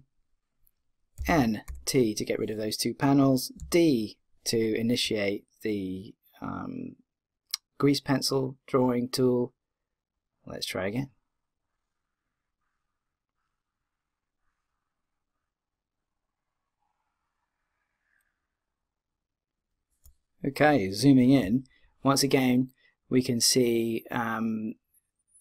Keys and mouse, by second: 1.2 n, 1.6 t, 3.6-10.0 d, 10.2-12.0 drag, 21.7-23.8 middle drag.